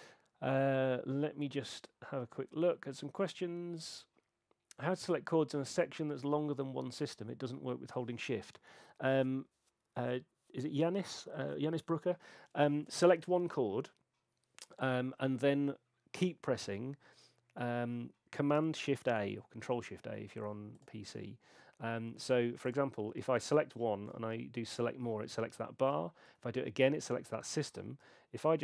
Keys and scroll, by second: 24.7 shift+super+a, 26.3 shift+super+a, 28.0 r.